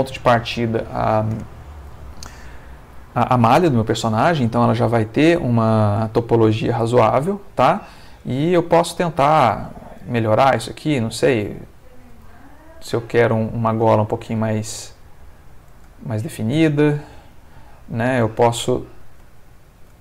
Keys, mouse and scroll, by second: 4.5-9.6 middle drag, 9.6 ctrl+Tab, 11.1 click, 12.3 g, 13.2 click, 14.0 shift+click, 14.3 shift+g, 15.2 click, 15.6 shift+click, 16.7 shift+g, 17.2 shift+click, 17.6 shift+middle click, 19.0 shift+click, 19.6 shift+click.